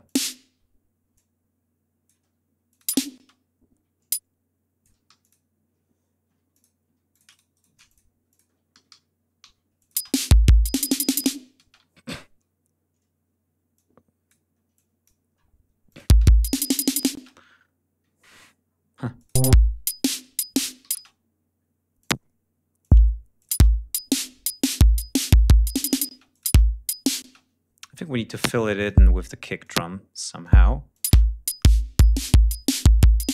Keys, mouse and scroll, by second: 1.0 alt+click, 2.5 alt+click, 2.7 space, 3.9 alt+click, 4.9 alt+g, 5.0 alt+click, 6.1 s, 6.3 click, 6.9-7.6 shift+drag, 7.1 shift+right click, 7.7 shift+click, 8.1 ctrl+shift+click, 8.5 ctrl+alt+shift+d, 9.6 alt+click, 9.8 alt+space, 11.4 ctrl+space, 11.6 ctrl+scroll up 2, 13.6 click, 14.6 click, 15.7 click, 15.9 space, 17.0 space, 17.9 ctrl+scroll down 2, 18.5 ctrl+scroll up 2, 19.0 click, 19.2 space, 19.4 ctrl+scroll up 1, 20.6 d, 20.8 space, 21.8 click, 22.6 click, 23.2 click, 23.4 space, 25.1 ctrl+scroll down 2, 25.5 ctrl+scroll up 2, 25.9 space, 26.1 ctrl+click, 27.0 space, 28.1 click, 28.7 click, 29.4 click, 30.2 click, 30.7 click, 30.9 space.